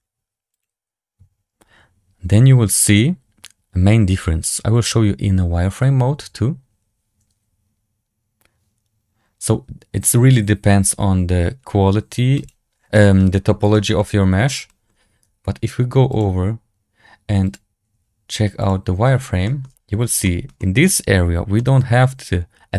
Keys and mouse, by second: 0.5 click, 12.8 shift+drag, 13.6 shift+click, 13.9-14.3 drag, 13.9-14.3 right drag, 14.6 shift+drag, 16.0 click, 17.4-19.0 drag, 19.3 shift+click, 20.1 shift+middle drag, 20.5 middle click, 21.5 middle click.